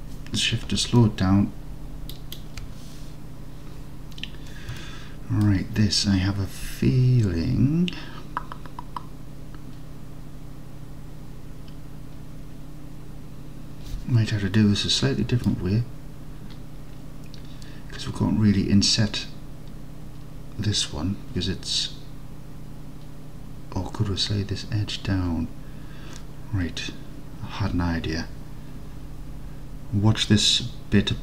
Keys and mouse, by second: 5.0 alt+click, 14.6 middle click, 15.2 middle click.